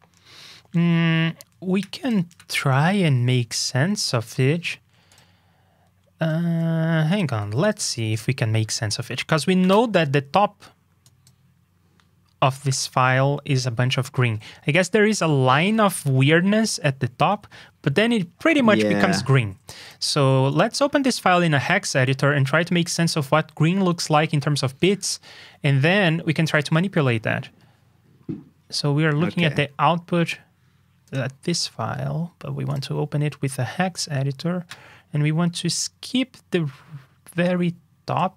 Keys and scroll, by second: 3.2 super+s, 7.4 super+c, 7.8 super+v.